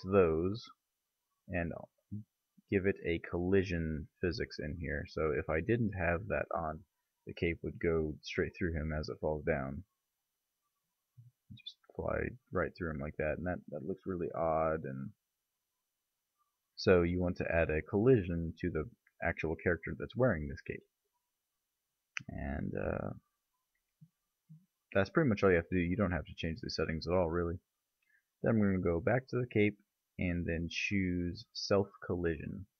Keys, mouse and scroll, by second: 0.2 click, 2.1-3.9 middle drag, 4.3 click, 6.4 click, 9.4 middle click, 15.2-18.0 drag, 21.0-22.7 middle drag, 28.4-30.2 right drag, 30.2-32.2 middle drag, 32.2 click.